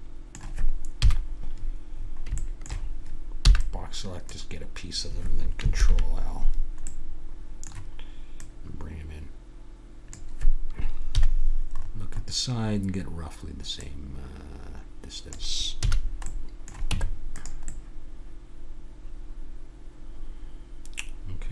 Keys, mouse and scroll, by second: 0.9 KP_7, 3.5 b, 5.7 ctrl+l, 6.9-8.4 middle drag, 8.4-10.9 drag, 11.1 KP_3, 11.7 middle click, 11.9 click, 12.1-13.8 middle drag, 13.8 click, 15.6-17.8 middle drag, 15.8 a, 17.0 Tab, 18.0-19.5 middle drag.